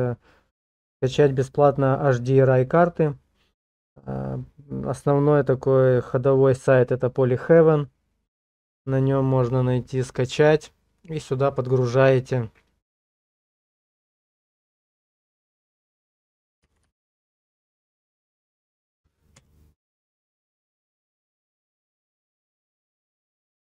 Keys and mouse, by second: 17.7 BackSpace.